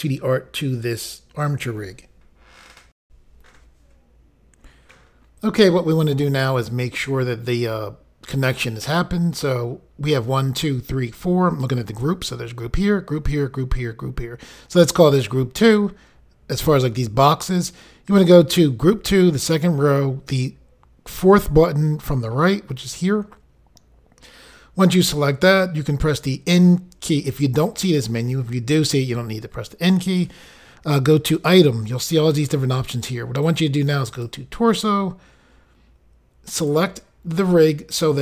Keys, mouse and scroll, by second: 3.0 Insert, 22.8 click, 23.0 click, 31.5 click, 31.6 click, 34.1 click, 34.2 click, 36.5 click, 36.7 click.